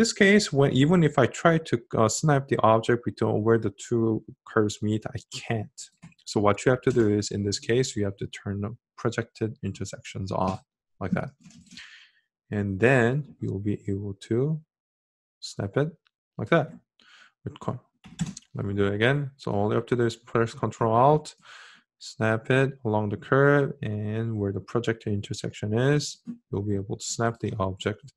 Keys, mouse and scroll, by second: 19.8-25.3 ctrl+alt+drag.